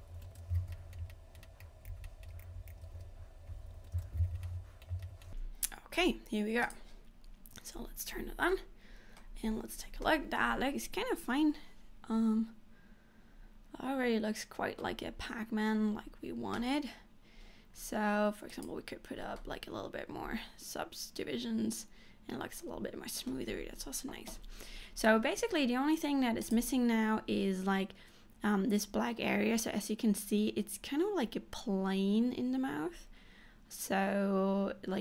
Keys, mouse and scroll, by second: 0.6 scroll down 4, 0.8 shift+middle click, 1.0 scroll up 3, 1.2 middle click, 1.5 middle click, 1.9 click, 2.1 middle click, 2.4 shift+click, 2.7 click, 3.0 shift+e, 4.2 scroll down 8, 4.5 middle click, 4.9 scroll up 3, 5.1 shift+middle click, 6.9 click, 7.4 scroll up 1, 7.9 Tab, 8.4 scroll down 1, 8.7 middle click, 9.5 scroll down 2, 10.2 middle click, 15.3-15.9 scroll down 1, 15.9-17.2 scroll down 1, 18.7 click, 19.6 middle click, 23.7 scroll up 2, 24.6-26.6 scroll up 1.